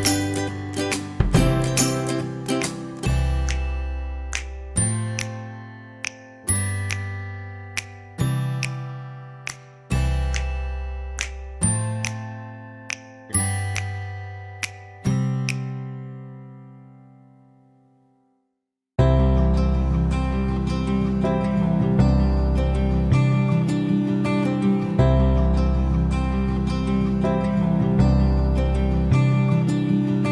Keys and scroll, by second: 0.7 ctrl+f.